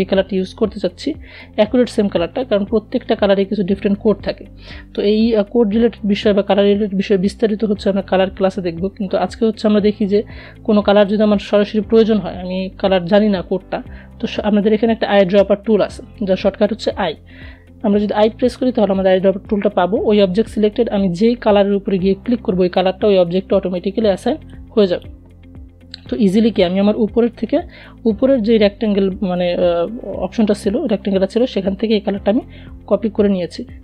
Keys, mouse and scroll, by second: 16.7 i, 22.8 click, 31.2-31.6 alt+scroll up 1, 33.2 shift+click.